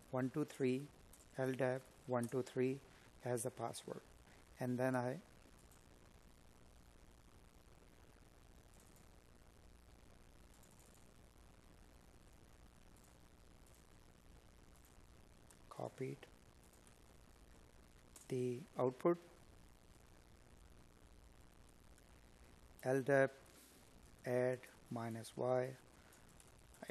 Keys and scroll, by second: 18.4 space, 19.7 space.